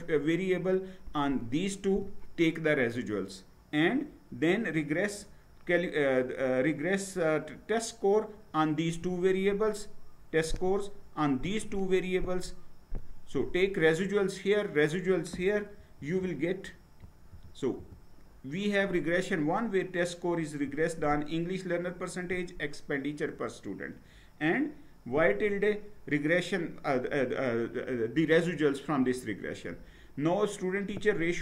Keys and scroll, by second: 15.8 Down, 16.3 Down, 16.9 Down, 17.1 Down, 17.4 Down, 17.8 Down.